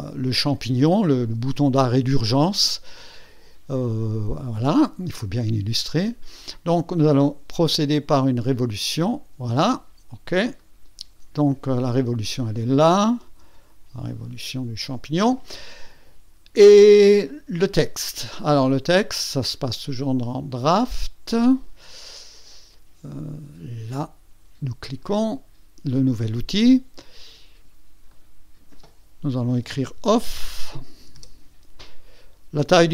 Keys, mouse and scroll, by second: 3.2 click, 8.4 click, 10.5 click, 10.8 click, 12.6-13.1 drag, 13.2 KP_2, 19.4 click, 20.5 click, 20.8 click, 24.9 click, 28.1 click, 29.9 shift+o, 31.0 f.